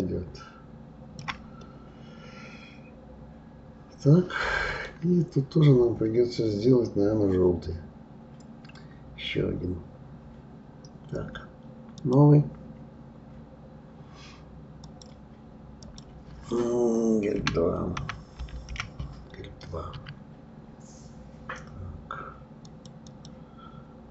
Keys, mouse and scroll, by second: 0.0-1.6 shift+drag, 1.6-4.6 middle drag, 12.0 click, 14.8 click, 15.8-18.8 drag, 23.1 click.